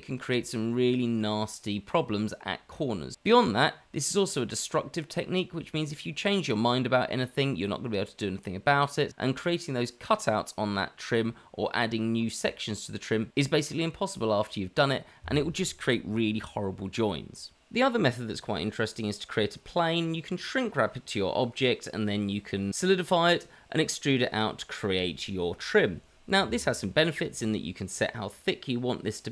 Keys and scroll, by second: 0.4 shift+z, 1.2 shift+z, 1.5 c, 5.5 x, 5.8 c, 9.2 c, 13.4 q, 14.8 Tab, 15.0 Tab, 19.1 shift+a, 20.2 Escape, 20.4 shift+a, 21.3 g, 22.3 r, 23.0 g, 24.2 g, 25.6 shift+z, 25.9 Tab, 25.9 shift+z, 26.1 g, 26.9 Tab.